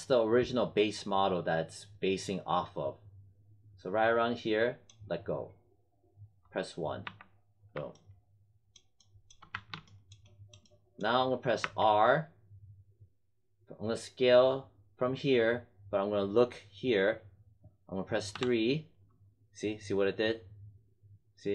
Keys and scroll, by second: 7.0 1, 9.5 w, 11.5 r, 18.3 3.